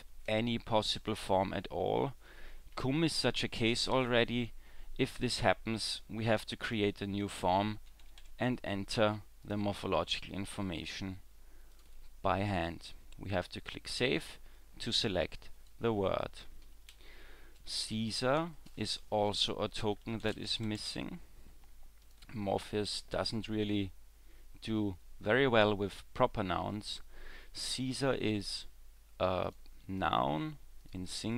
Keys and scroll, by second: 16.7 w, 16.9 w.